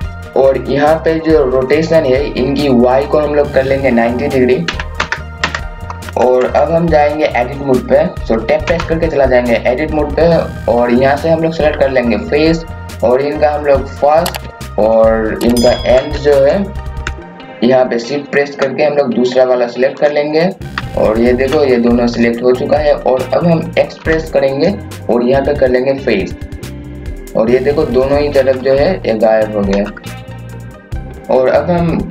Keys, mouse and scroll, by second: 5.8 click, 6.1 KP_6, 8.6 Tab, 12.8 click, 15.4 KP_6, 20.8 KP_4, 24.0 x, 26.5 click, 28.4 KP_4, 29.7 KP_2, 30.3 KP_8.